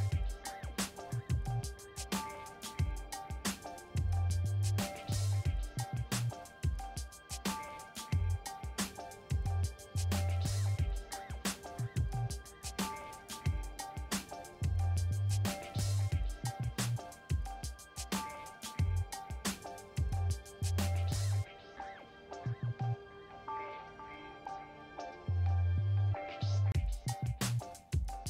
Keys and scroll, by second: 12.2 v, 14.2 ctrl+t, 19.7 Return.